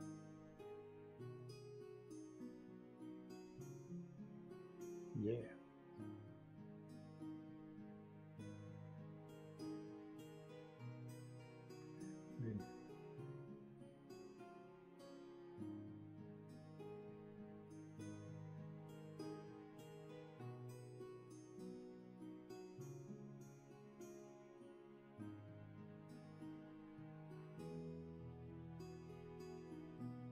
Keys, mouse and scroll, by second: 4.1 shift+space, 8.0 space, 12.3 space, 12.9 shift+space, 13.7 space, 14.5 shift+space, 22.8 space, 23.9 shift+space, 25.1 space, 26.2 shift+space, 28.8 ctrl+z.